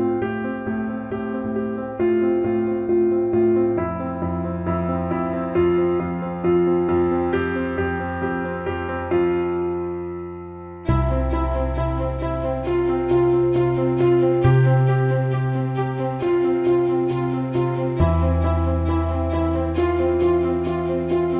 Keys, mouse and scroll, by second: 0.8 alt+middle click, 1.7 alt+middle click, 3.5-4.9 shift+drag, 5.1-9.6 alt+middle drag, 10.0-11.1 drag, 12.5-14.1 ctrl+drag, 14.3-16.8 alt+middle drag, 17.3 click, 18.1 click, 18.3 click, 19.4 click, 19.6 alt+middle click, 20.6 alt+middle click, 20.9 alt+shift+middle click.